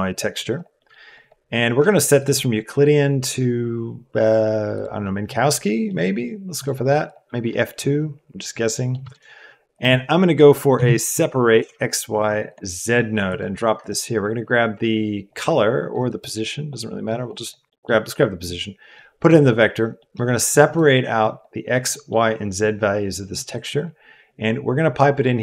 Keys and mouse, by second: 1.2 click, 2.3-4.8 drag, 5.9 click, 6.7 click, 8.7 click, 9.1 shift+a, 12.7 click, 13.2 click, 15.2-16.0 drag, 16.4-17.0 drag, 17.2 click, 17.8 middle click, 19.0 click, 19.5 middle click, 19.9 middle click, 20.7 click, 21.1 click, 22.0 middle click, 23.3 click.